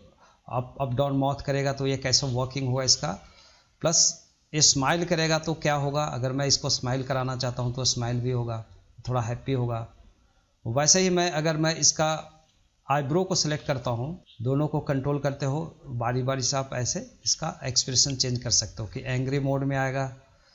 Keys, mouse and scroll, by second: 2.9-4.4 shift+middle drag, 4.4-8.7 drag, 8.7-9.1 middle drag, 9.1 drag, 9.3 scroll down 2, 9.6-11.5 middle drag, 11.5-12.1 drag, 12.1-14.2 middle drag, 14.2-18.7 drag, 18.7-19.0 scroll down 3, 19.0-20.5 middle drag.